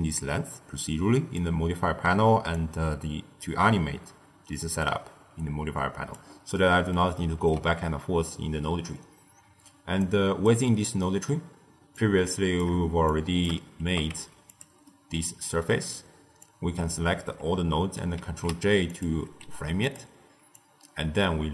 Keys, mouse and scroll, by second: 2.4-5.4 drag, 6.4-8.7 middle drag, 8.7-9.9 scroll down 1, 9.9 click, 10.6-10.9 scroll down 2, 10.9-11.9 middle drag, 11.9 drag, 12.9 shift+drag, 13.7 g, 14.8-16.3 middle drag, 16.3 click, 18.1 ctrl+j, 18.8 click, 19.3 g, 20.4 click.